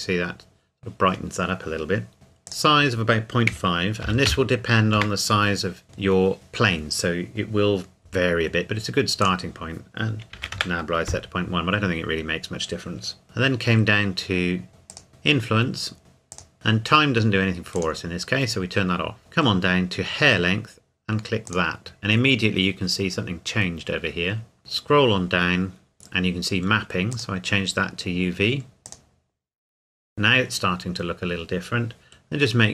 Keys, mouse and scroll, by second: 2.5 click, 3.5 KP_Decimal, 4.1 KP_5, 5.0 KP_Enter, 9.2 click, 10.3 KP_Decimal, 10.4 KP_1, 10.5 KP_Enter, 13.2-14.7 scroll down 1, 14.9 click, 16.3 click, 16.5 scroll up 1, 16.6-17.8 scroll down 1, 17.8 click, 19.2-20.9 scroll down 1, 21.6 click, 24.6-26.5 scroll down 1, 27.1 click.